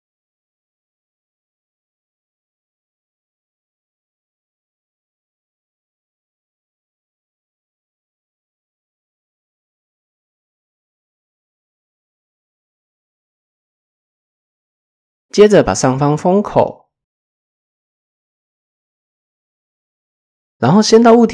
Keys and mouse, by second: 0.5 shift+click, 1.4 KP_1, 1.8 KP_7, 2.8 shift+click, 5.4 s, 8.7 middle click, 9.7 KP_1, 10.6 shift+middle click, 12.5 shift+middle click, 14.6 middle click, 15.5 shift+middle click, 16.9 middle click, 17.2 click, 18.1 f, 18.8 middle click, 19.6 middle click, 20.7 Tab, 20.8 ctrl+a.